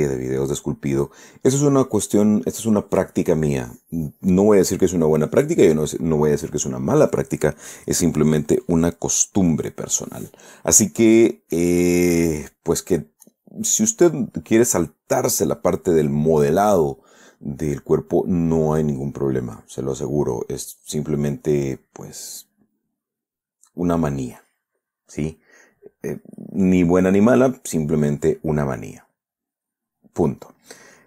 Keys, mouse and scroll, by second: 18.6-20.0 middle drag, 21.2 click, 21.9 click, 23.5 middle click, 26.6 click.